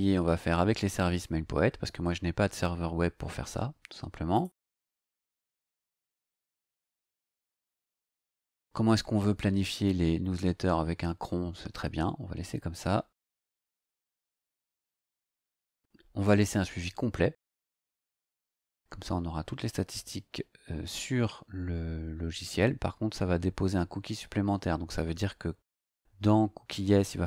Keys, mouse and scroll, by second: 4.3 click, 4.9 click, 14.4-14.9 scroll down 4.